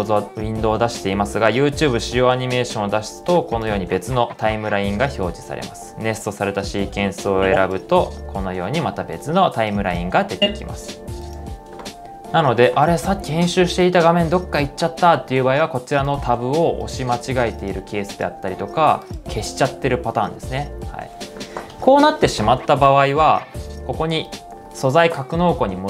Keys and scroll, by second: 22.2 typing.